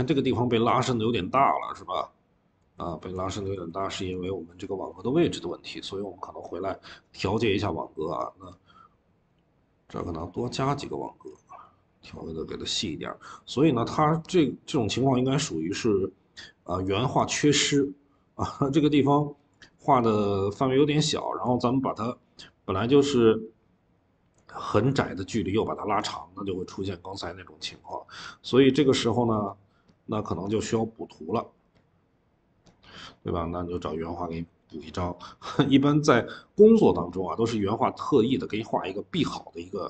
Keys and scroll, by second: 2.9-3.9 typing, 6.2-6.6 typing.